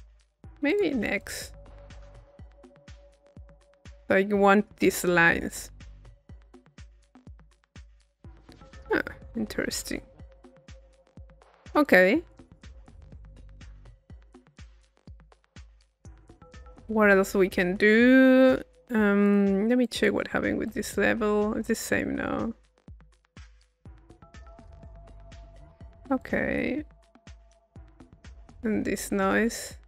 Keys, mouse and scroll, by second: 1.2 click, 2.1 click, 2.9-4.6 drag, 8.8-11.4 middle drag, 11.8-13.8 drag, 13.5-15.5 middle drag, 16.0-18.7 middle drag, 19.3 click, 19.9-25.6 drag, 26.2 click, 27.2 click, 28.5-29.8 drag.